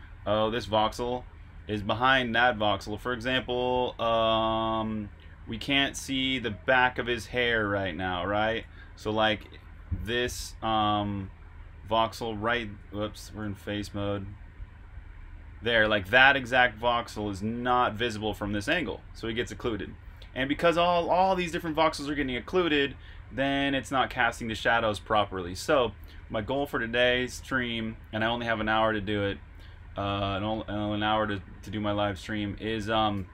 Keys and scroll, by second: 13.0 super+z, 14.2 v, 20.1 super+z, 26.3 super+Tab, 33.1-33.3 typing.